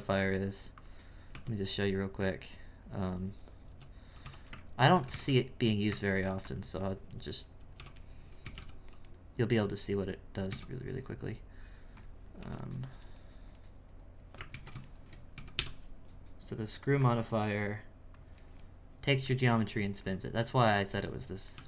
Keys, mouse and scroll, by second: 1.3 Tab, 1.7-3.7 middle drag, 3.7 3, 4.8 ctrl+alt+right click, 5.0 x, 6.0 ctrl+r, 7.7 3, 8.0 right click, 8.4 x, 9.0 right click, 10.5 x, 12.4 2, 12.6 right click, 13.0 right click, 13.5 right click, 14.5 ctrl+z, 14.9 shift+right click, 15.3 x, 17.0-18.6 drag, 18.6-20.3 middle drag, 20.3 1, 20.7 right click, 21.1 middle click, 21.5 e.